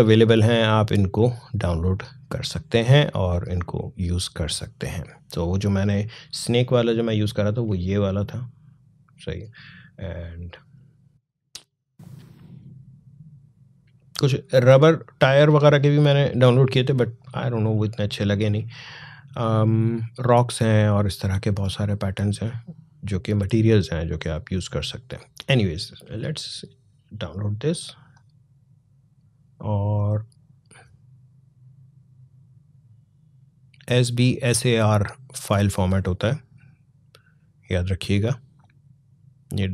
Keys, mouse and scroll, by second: 1.6 scroll down 1, 2.8 scroll down 1, 3.4 scroll down 1, 4.4 scroll down 1, 6.6 scroll up 1, 11.5 scroll down 1, 12.2 scroll down 1, 13.7 scroll down 1, 15.9 scroll down 1, 16.5 scroll down 1, 18.6 scroll down 1, 21.3 scroll down 1, 23.0 scroll down 1, 27.9 click.